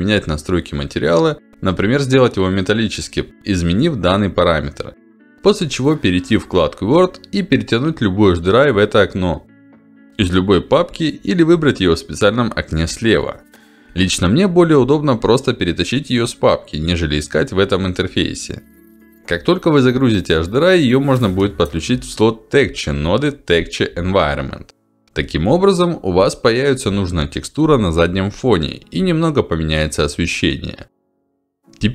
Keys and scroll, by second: 3.9 ctrl+alt+d, 6.5 ctrl+alt+d.